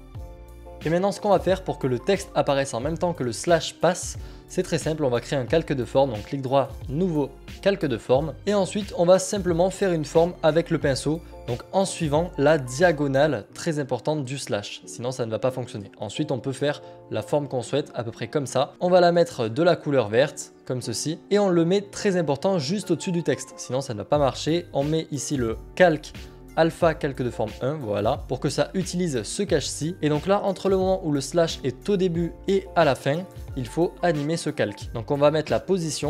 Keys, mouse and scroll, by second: 0.7 ctrl+z, 2.3 click, 5.8 right click, 9.9 click, 10.9 click, 12.2 click, 15.6 click, 18.0 click, 18.9 click, 21.2 click, 25.6 click, 26.8 click, 30.6 click, 35.2 click.